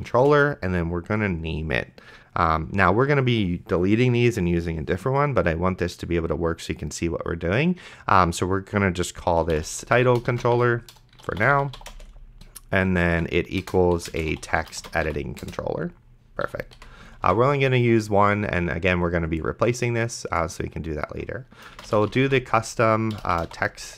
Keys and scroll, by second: 0.1 space, 4.3 space, 9.5-15.5 typing, 16.5 End, 16.8 ;, 17.5 ctrl+s, 21.6-23.9 typing.